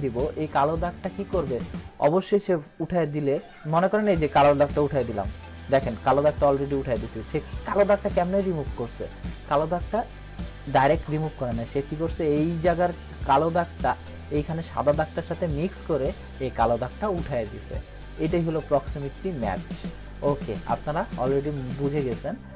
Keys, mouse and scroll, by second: 4.5 click, 4.6 click, 21.3 click, 21.5-21.8 scroll down 1.